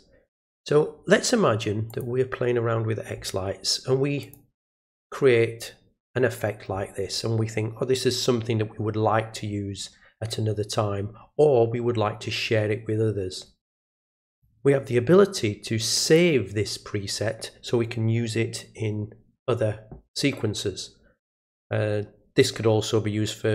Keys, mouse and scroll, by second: 1.9 click, 4.2 click, 6.1 click, 14.3 click, 16.0 click.